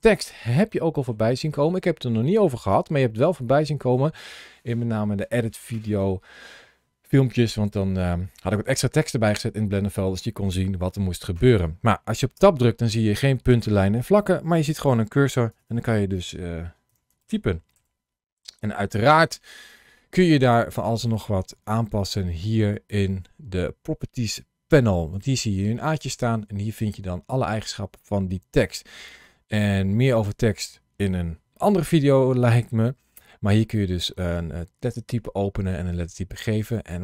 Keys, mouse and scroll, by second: 0.5 middle click, 1.3 middle click, 2.1 middle click, 3.0-3.6 scroll up 1, 3.6 click, 12.2 Tab, 15.2 BackSpace, 15.4 BackSpace, 16.7 2, 17.0 shift+d, 17.6 3, 18.5 shift+d, 18.9 Tab, 22.9 ctrl+shift+a, 25.7 click, 30.0 click, 36.7 click.